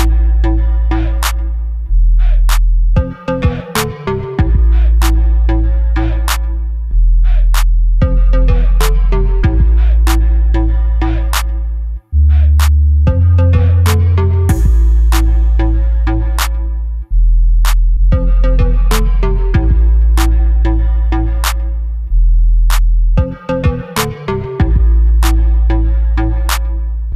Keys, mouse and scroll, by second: 1.9 scroll down 1, 2.6 click, 3.0 shift+d, 3.8 click, 3.9 KP_7, 4.5-4.9 scroll up 1, 4.9 g, 5.6 Escape, 5.7 g, 6.7 click, 6.9 KP_3, 7.7 KP_1, 8.3-8.9 scroll up 1, 8.9 g, 9.6 click, 10.0 r, 10.7 Escape, 10.9 r, 12.1 Escape, 12.2 r, 12.8 Escape, 13.0 r, 13.7 click, 13.9-14.3 scroll up 1, 14.3 s, 15.7 click, 16.0 g, 17.0 click, 17.3 z, 17.6 Escape, 17.7 s, 18.4 click, 19.1 g, 20.2 click, 20.4-22.7 middle drag, 20.8 scroll down 2, 21.3 scroll down 2, 21.9 scroll up 2, 22.2 s, 22.7 click, 22.9-24.9 middle drag, 23.6 scroll down 2, 24.0-24.9 scroll up 2, 24.9 click, 25.3 Tab, 25.8 click.